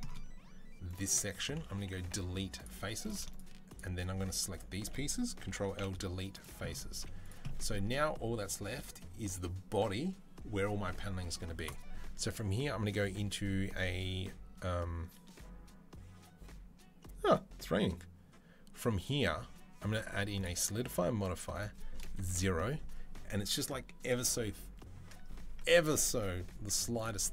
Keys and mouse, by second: 0.2 alt+shift+right click, 0.9 middle click, 1.8 Delete, 3.0-4.7 shift+drag, 5.0 ctrl+click, 5.3 ctrl+l, 5.5 Delete, 6.7 z, 7.7 Tab, 8.6-11.5 shift+middle drag, 11.5-27.3 drag, 26.5 z, 27.1 Tab.